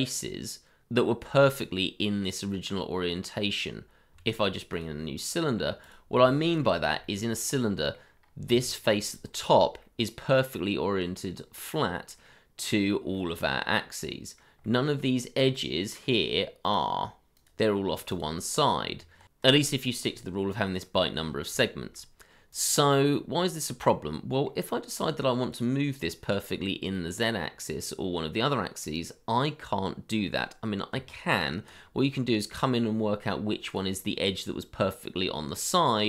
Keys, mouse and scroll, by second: 0.1 middle click, 2.4-3.7 scroll down 1, 3.9 scroll up 1, 4.6 shift+a, 7.0 shift+middle click, 7.2-7.9 scroll up 1, 7.9 middle click, 8.2 scroll up 1, 8.5 Tab, 9.5 scroll down 1, 10.1 middle click, 15.9-17.4 scroll up 1, 17.7-18.8 scroll down 1, 18.8 Tab, 19.3 middle click, 19.8-20.2 scroll down 2, 20.2 scroll up 1, 20.4 middle click, 21.8 middle click, 22.0 shift+middle click, 22.7-23.1 scroll down 1, 23.3 middle click, 26.0-26.9 scroll up 1, 26.9 middle click, 30.9 Tab, 35.1-36.0 scroll down 1.